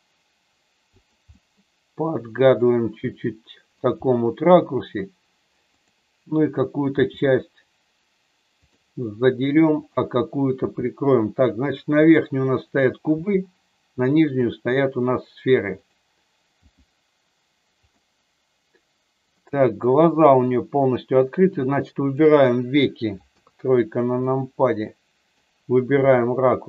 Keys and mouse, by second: 0.9 click, 1.4-3.8 middle drag, 5.7 click, 6.8 g, 9.8 click, 10.5 g, 11.9 click, 12.5 click, 13.3 g, 16.5 g, 17.8 click, 19.4-20.4 middle drag, 21.5 click, 23.3 KP_3, 24.3-25.4 middle drag, 25.9 r.